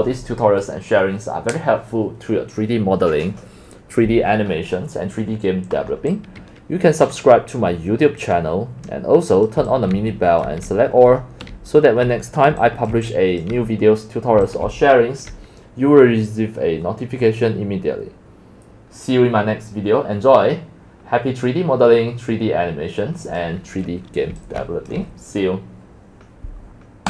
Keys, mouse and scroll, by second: 6.0 right click, 6.7 click, 8.3-9.5 drag, 9.7 drag, 10.3 click, 10.9 click, 11.8 click, 12.6-21.0 typing, 16.3-17.2 drag, 24.3 x, 24.6 c.